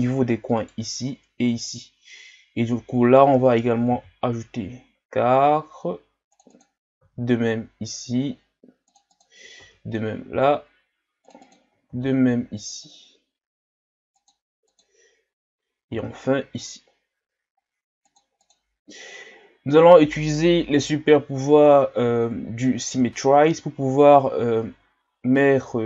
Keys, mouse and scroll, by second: 0.6-3.9 right drag, 3.9 ctrl+r, 6.5 click, 7.0 ctrl+r, 9.1 click, 9.6 ctrl+r, 11.4 click, 11.9 ctrl+r, 14.7 click, 15.9 ctrl+r, 18.4 click, 18.8-20.2 scroll down 3, 21.8-22.3 scroll down 1, 22.9 KP_7, 23.9-25.8 scroll up 1.